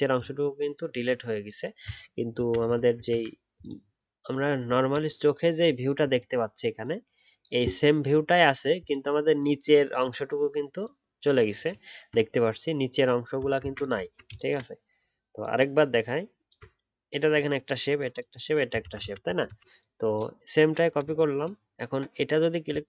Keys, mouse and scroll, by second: 2.6 ctrl+z, 2.9 ctrl+z, 4.7 alt+scroll down 1, 11.8 alt+scroll up 1, 13.6 ctrl+z, 14.0 alt+scroll down 1, 15.9 alt+click, 18.7 alt+Left, 19.0 ctrl+z, 19.4 ctrl+z.